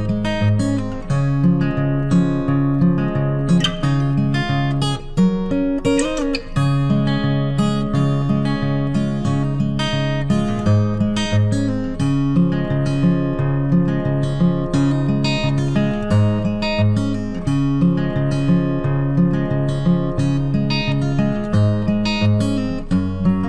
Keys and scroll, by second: 7.7 ctrl+t, 22.0 ctrl+t.